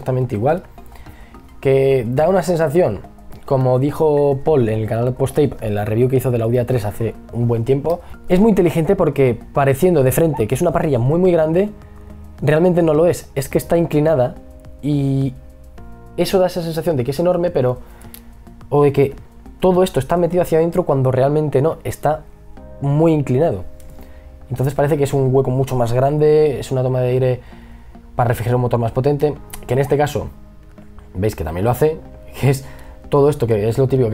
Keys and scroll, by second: 24.2 e, 29.6 b, 31.8 ctrl+z.